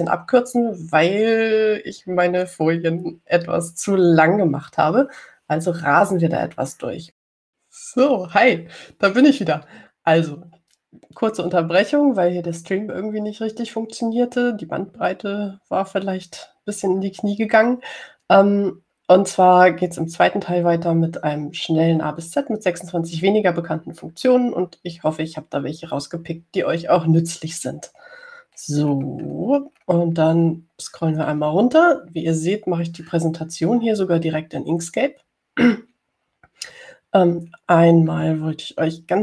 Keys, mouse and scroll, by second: 5.1 scroll up 2, 6.0 scroll down 2, 29.9-31.2 scroll down 6, 31.2-31.9 scroll down 2.